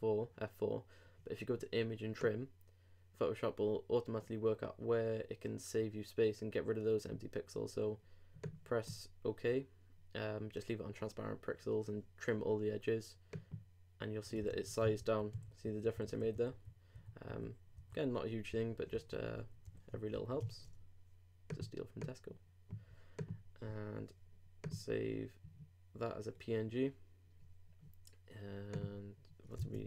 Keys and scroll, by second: 14.5 super+z, 15.8 super+z, 19.9 shift+super+z, 20.1 alt+shift+super+s, 29.6 super+Tab.